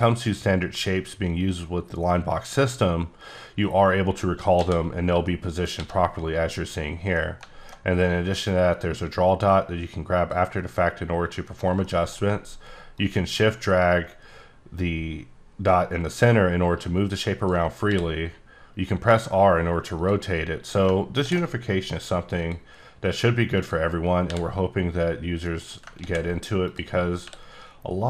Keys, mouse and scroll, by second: 4.6 c, 5.2 middle click, 5.9 c, 7.1 middle click, 8.3 click, 11.8 shift+middle click, 13.0 shift+click, 17.9 r, 20.0 click, 21.2 ctrl+d, 22.4 click, 23.0 click, 24.3 r, 25.6 click, 26.0 ctrl+d, 26.6 click, 27.2 r.